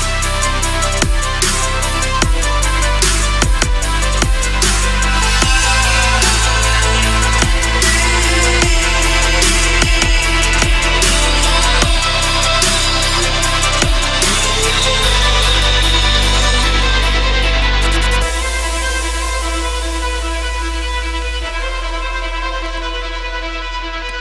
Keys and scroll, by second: 8.3 Return, 9.4 ctrl+=, 11.9 ctrl+=, 21.5 Return.